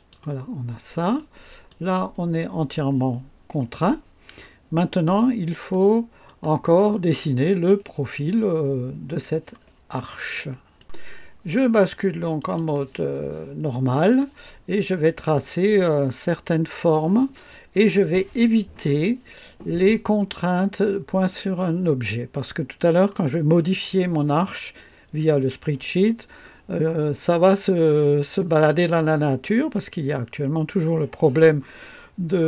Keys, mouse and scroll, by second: 0.5 scroll down 1, 1.1-1.9 right drag, 5.0-5.3 scroll up 2, 5.7-6.4 right drag, 5.8 click, 6.7 scroll up 2, 7.2-7.8 right drag, 7.3 click, 10.7 click, 10.8 right click, 12.3 click, 13.6 scroll up 2, 14.1-15.2 right drag, 16.5 scroll down 2.